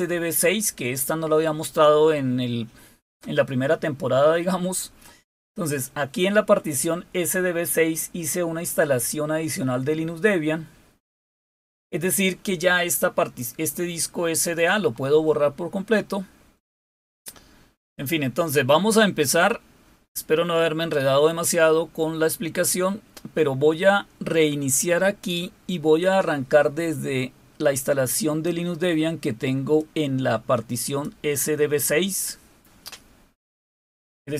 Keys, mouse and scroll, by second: 29.5-30.8 drag, 31.0 click.